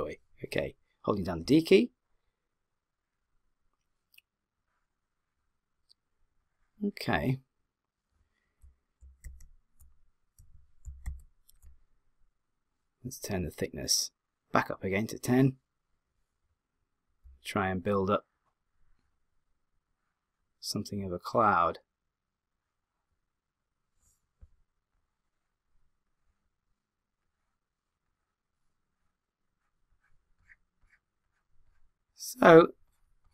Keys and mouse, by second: 1.4 d, 1.9 click, 10.9 d, 11.1 w, 17.3-18.1 d, 18.1 click.